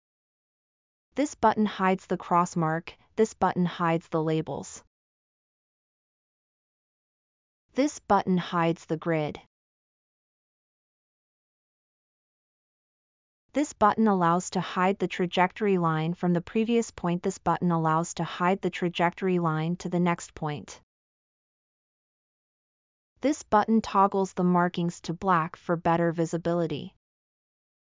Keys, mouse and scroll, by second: 3.6-7.4 drag.